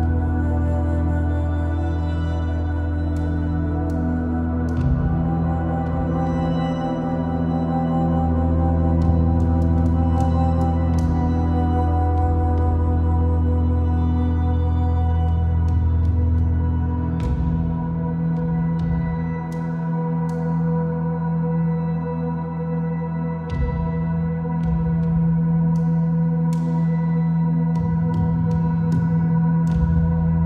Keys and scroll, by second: 2.0 Return, 15.0 super+t, 19.4 Return.